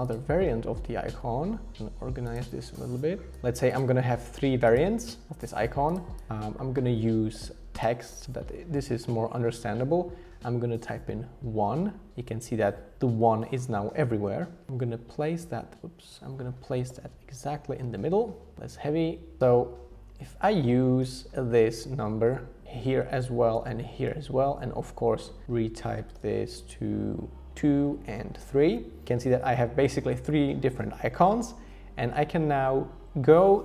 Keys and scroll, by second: 7.3 t, 10.9 1, 12.1 Escape, 14.7 shift+Up, 15.8 super+z, 16.9 alt+h, 17.0 alt+v, 17.8 Down, 18.5 Right, 18.7 Down, 19.0 Left, 21.0 super+c, 22.8 super+v, 23.9 super+v, 26.1 2, 28.4 3, 29.1 ⟲.